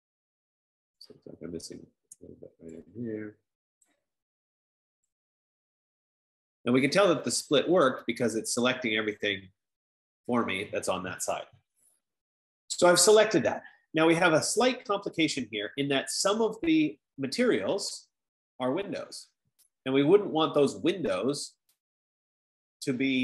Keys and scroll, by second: 7.7 F15.